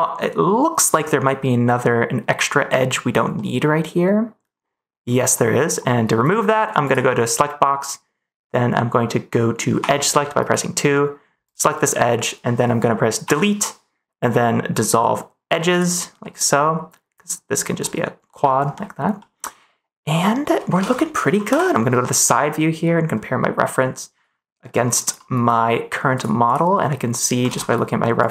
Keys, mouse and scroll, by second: 3.3-5.0 middle drag, 5.3 middle click, 6.8 click, 9.7 2, 10.9 right click, 11.0 middle click, 11.7 middle click, 13.2 Delete, 16.1-17.6 middle drag, 17.7 middle click, 18.7 middle click, 19.1-20.5 middle drag, 20.7 ctrl+s, 26.4 click, 27.4 ctrl+s.